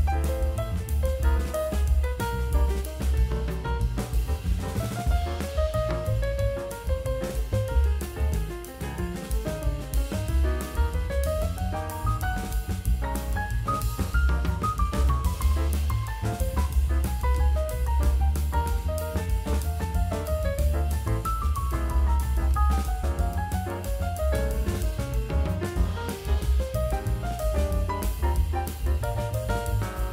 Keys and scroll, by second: 0.8-4.5 typing, 6.0-8.5 typing, 14.3 space, 14.8 space, 15.1 space, 15.5 space, 19.7 space, 20.1 ], 21.3 space, 21.6 space, 22.1 space, 23.4 [, 26.3 [, 27.0 2, 29.0 space, 30.0 ].